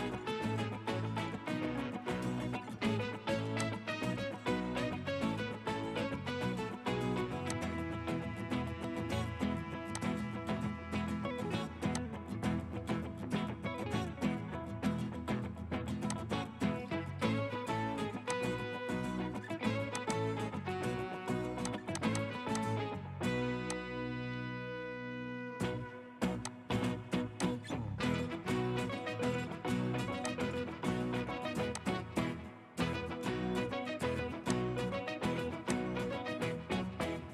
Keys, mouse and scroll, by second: 5.9 right click, 10.8 scroll up 1, 20.1 double click, 21.0 1, 22.0 double click, 36.2 scroll up 1, 36.6 middle click.